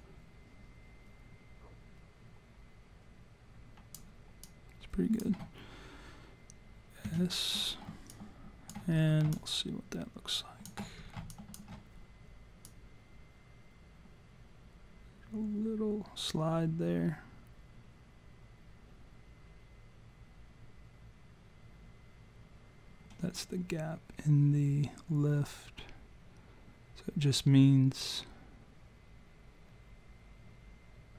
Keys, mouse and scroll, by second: 4.4 alt+click, 7.0 s, 8.1 alt+click, 8.9-9.2 scroll down 4, 9.3 alt+click, 11.0-11.3 scroll down 2, 11.3 alt+click, 12.7 click.